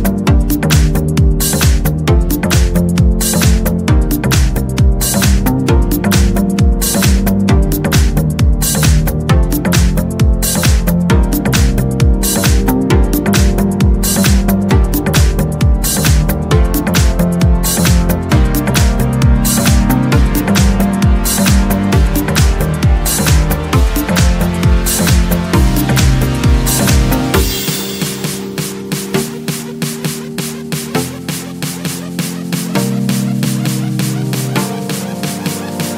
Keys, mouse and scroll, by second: 0.4 0, 2.5 click, 3.5 1, 4.5 scroll down 1, 5.4-5.9 scroll up 1, 5.9-6.8 scroll down 1, 6.8-12.1 drag, 12.5-13.1 scroll down 1, 13.1-13.5 scroll up 1, 13.5-14.9 scroll down 1, 14.9-18.8 drag, 19.3 click, 20.3 o, 20.6 ,, 21.3 5, 23.0-27.2 drag, 27.7-33.1 drag, 33.5 click, 34.6 click, 35.2-35.5 scroll up 1, 35.7-35.9 scroll down 2.